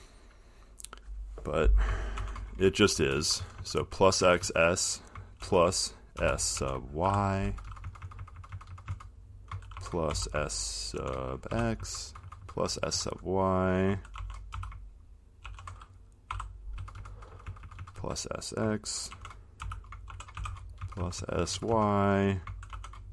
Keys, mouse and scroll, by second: 2.1 click, 3.2 Right, 3.4-4.3 Right, 5.4 shift+Right, 6.4-7.7 typing, 9.8-12.0 typing, 14.8-17.0 typing, 19.1-21.1 typing, 22.7-23.1 typing.